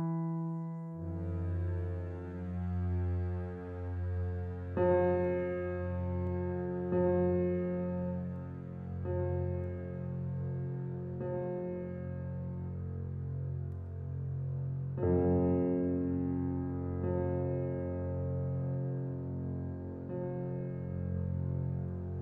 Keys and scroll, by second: 2.8 space, 18.9 shift+a.